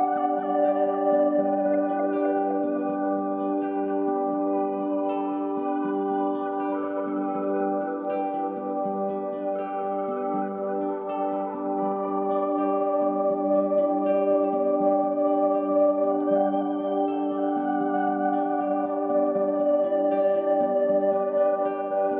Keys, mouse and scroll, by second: 1.8-8.0 drag, 8.0-11.0 middle drag, 12.2-20.4 drag, 20.5-22.1 drag.